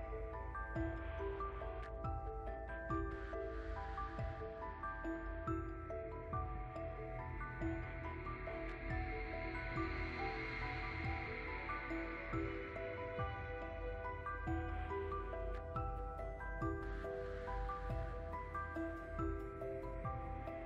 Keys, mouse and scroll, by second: 0.4 middle drag, 0.6 click, 0.9 shift+middle click, 1.3 click, 1.4 shift+middle click, 1.6 drag, 1.7 middle drag, 1.8 ctrl+z, 1.9 middle click, 2.0 click, 2.1 middle click, 2.3 ctrl+z, 2.4 click, 2.4 middle drag, 2.6 ctrl+z, 2.7 middle drag, 2.8 ctrl+z, 2.9 middle click, 3.0 click, 3.3 ctrl+z, 3.5 click, 4.1 middle click, 4.2 click, 4.3 middle drag, 4.4 click, 4.6 middle click, 4.8 f, 4.8 click, 4.9 middle click, 5.0 scroll up 2, 5.1 middle click, 5.3 click, 5.4 middle click, 5.6 click, 5.7 middle click, 5.9 click, 6.3 F10, 6.4 click, 7.0 shift+middle click, 7.2 click, 7.6 ctrl+z, 7.9 click, 8.0 ctrl+z, 8.2 click, 8.3 middle click, 8.3 click, 8.6 f, 8.6-9.6 drag, 9.6 f, 9.7 drag, 9.9 middle click, 10.0 click, 10.3-10.9 middle drag, 10.9 click, 11.5 middle click, 11.7 click, 12.3 middle click, 12.6 click, 13.0 middle click, 13.6 click, 13.8 middle click, 14.0 click, 14.9 ctrl+s, 15.0 click, 15.2 f, 15.3 click, 15.6 f, 15.7 click, 16.2 middle click, 16.2 click, 16.5 middle click, 16.7 click, 16.8 middle click, 16.9-17.2 drag, 17.2 middle click, 17.5 f, 17.5 click, 17.7 middle click, 17.8 click, 18.0 middle click, 18.4 click, 19.4 ctrl+z, 19.5 click, 19.9 middle click, 20.0 click, 20.2-20.6 middle drag.